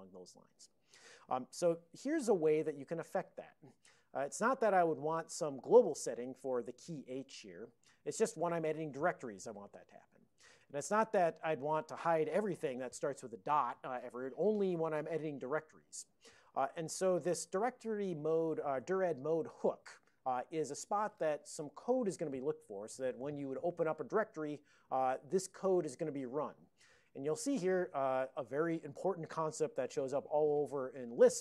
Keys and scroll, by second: 26.6 Down, 26.7 Down, 27.3 Up, 28.3 ctrl+a, 28.8 alt+f, 29.4 alt+b.